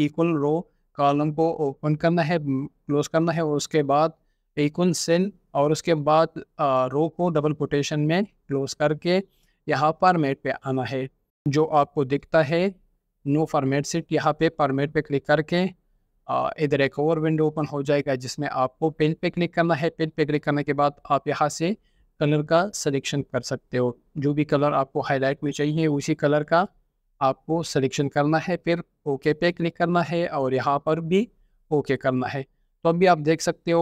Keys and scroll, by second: 0.4-2.9 typing, 6.6-7.4 typing, 8.7-10.9 typing, 33.3 ctrl+4.